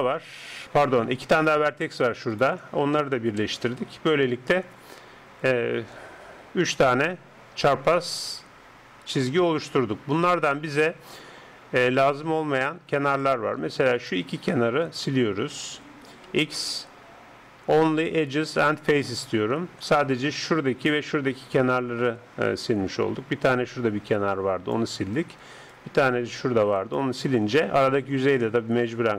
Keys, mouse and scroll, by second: 1.4 d, 3.4 j, 13.1-16.3 drag, 13.9-16.5 right drag, 16.3 x, 22.8-27.2 d, 23.8-25.5 drag, 25.7-29.1 drag.